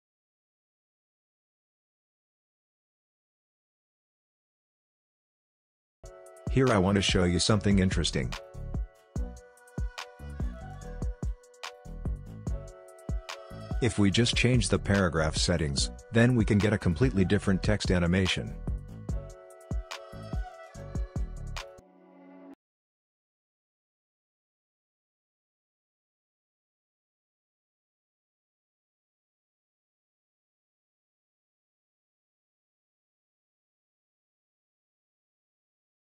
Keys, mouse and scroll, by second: 13.9-18.0 drag, 18.7 click, 21.0 click, 22.1 space, 23.5 click, 24.0 space, 25.6-27.5 drag, 29.0 space, 30.9 click, 31.3 space, 33.0 click, 33.6 space, 35.8 click.